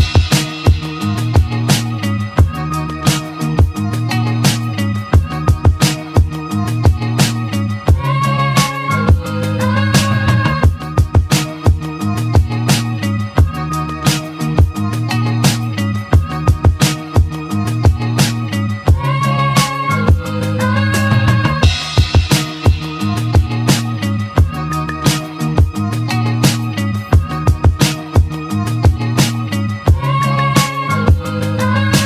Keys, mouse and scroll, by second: 0.0-1.6 middle drag, 1.6-2.3 scroll down 1, 2.3 click, 2.9-3.5 scroll up 2, 3.8-7.2 shift+middle drag, 9.2 Tab, 9.9 click, 10.8 2, 11.3 click, 11.9-13.0 shift+middle drag, 13.0 shift+click, 14.7 ctrl+b, 20.4-22.3 middle drag, 22.3 Tab, 22.8 click, 23.5 click, 25.0 click, 25.8 Tab, 27.0 click, 28.1 shift+click, 28.7-29.9 middle drag, 29.9 shift+click, 30.8 shift+click, 31.8 ctrl+z.